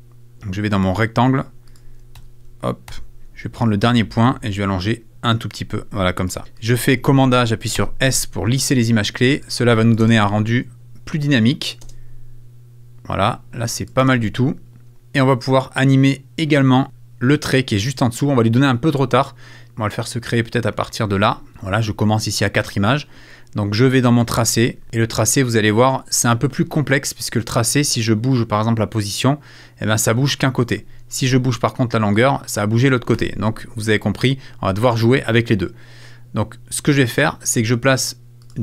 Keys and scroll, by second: 2.2 super+a, 2.9 super+f, 6.4 super+f, 6.9 super+a, 7.8 super+s, 9.4 space, 13.2 space, 31.2 super+z, 33.2 super+z.